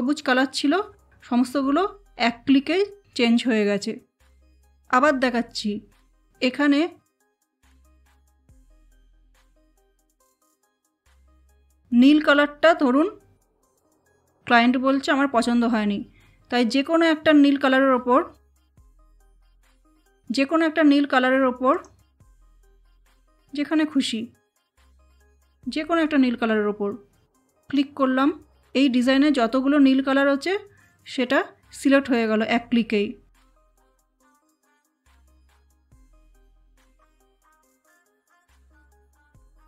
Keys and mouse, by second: 7.7 ctrl+Num_Lock, 7.8 ctrl+z, 10.1 ctrl+z, 18.5 click, 21.7 click, 27.6 click, 36.5 click.